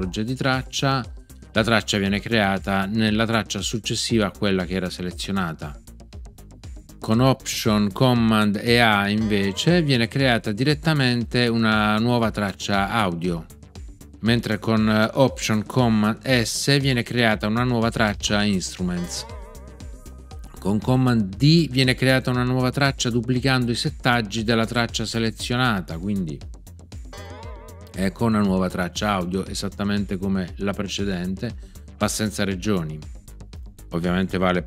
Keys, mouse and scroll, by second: 9.1 alt+super+a, 18.9 alt+super+s, 27.1 super+d.